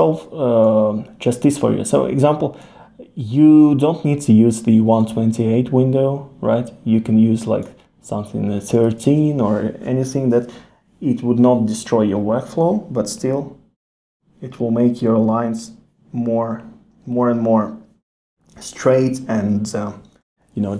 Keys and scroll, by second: 9.0 super+z, 20.5 super+z.